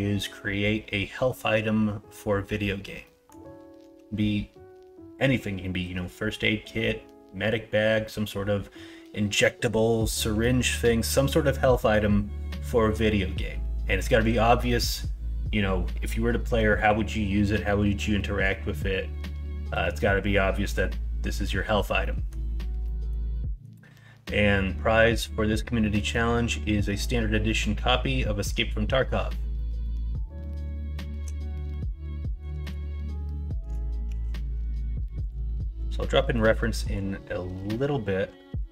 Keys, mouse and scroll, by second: 3.0 middle click, 10.0 middle click, 22.0 middle click, 22.8 middle click, 23.3 middle click, 25.8 middle click, 26.7 middle click, 29.5 middle click, 30.4 middle click, 30.7 shift+middle click, 32.1 middle click, 32.6 shift+a, 36.2 middle click, 37.4 n.